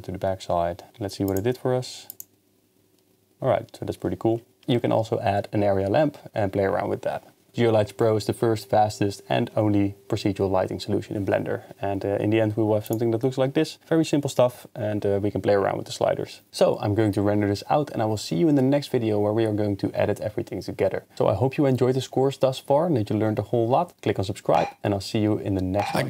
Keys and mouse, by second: 0.9 KP_0, 1.3 click, 12.9 click.